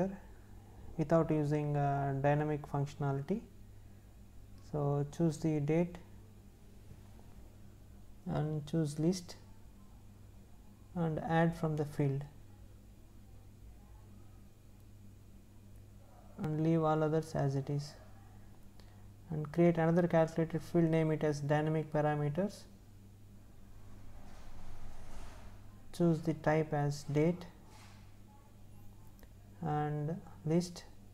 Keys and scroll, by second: 0.3 space, 23.0 space.